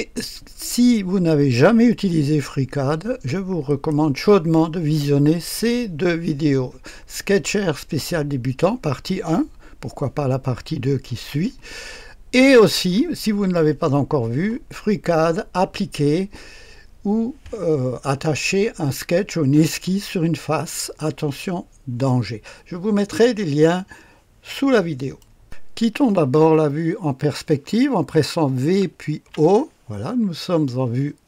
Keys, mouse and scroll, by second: 3.6 click, 12.4 click, 25.0 right click, 25.4 click, 28.6-29.2 typing.